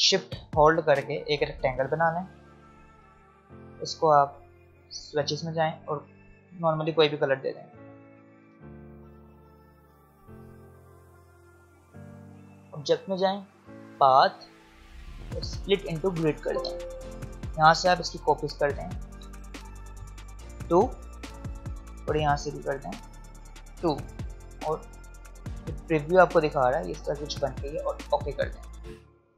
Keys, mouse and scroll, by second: 0.7-2.9 shift+drag, 2.9 v, 5.2 click, 8.4 v, 8.9 click, 9.6-10.0 alt+scroll up 1, 10.6 click, 21.1 click, 25.9 click, 29.2-29.3 alt+scroll up 1.